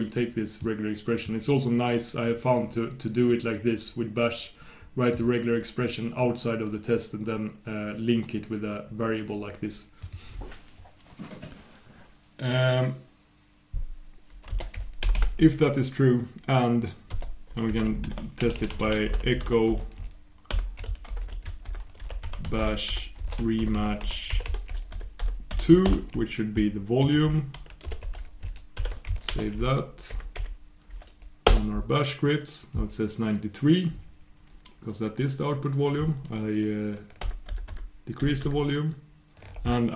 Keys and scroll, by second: 29.3 shift+super+Return, 37.2 super+'.